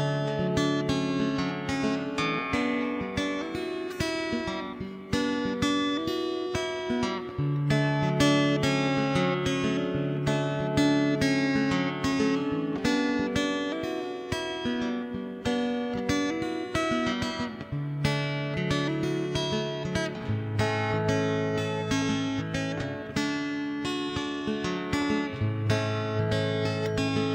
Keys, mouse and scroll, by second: 0.3 d, 0.4 click, 0.4 d, 0.9-2.2 middle drag, 1.2 click, 2.4 click, 2.9 click, 3.8 middle click, 4.6 d, 4.6 click, 6.8 middle click, 8.0 click, 8.5 middle click, 8.9 right click, 9.2 x, 9.6 0, 9.6 right click, 9.8 Tab, 9.9 click, 9.9-11.8 middle drag, 10.3 click, 10.9-12.2 drag, 11.8 right click, 12.3 click, 12.5 middle click, 13.9 g, 15.1 middle click, 15.9 middle click, 16.3 ctrl+shift+b, 17.3 click, 17.7 KP_0, 18.1 middle click, 18.9 click, 19.1 KP_0, 19.5 middle click, 20.0 click, 20.2 KP_0, 20.8 click, 21.0 KP_0, 21.4 middle click, 22.0 Tab, 22.3 ctrl+s, 22.5 middle click, 23.0 shift+d, 23.3 m, 23.7 middle click, 23.7 1, 24.3 ctrl+s, 25.0-26.0 middle drag, 26.0 alt+c, 26.5 shift+space, 27.0 click.